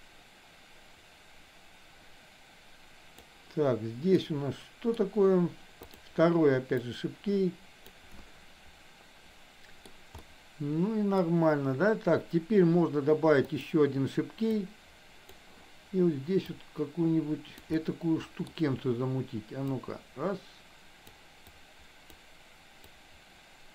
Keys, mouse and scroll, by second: 4.1 middle click, 5.9 click, 6.8-8.0 drag, 8.4-10.0 middle drag, 10.3-11.3 middle drag, 13.4 click, 14.6 click, 16.5-17.6 drag, 17.8 middle click, 19.8-21.0 drag, 21.6 click, 23.0-23.7 drag.